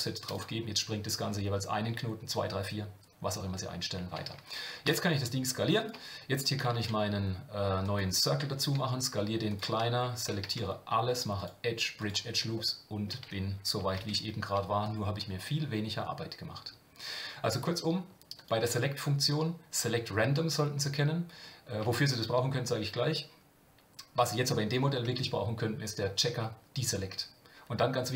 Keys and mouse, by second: 6.7 shift+a, 8.6 s, 10.4 a, 11.5 click, 12.7 middle click, 14.8 e, 18.4-27.5 drag.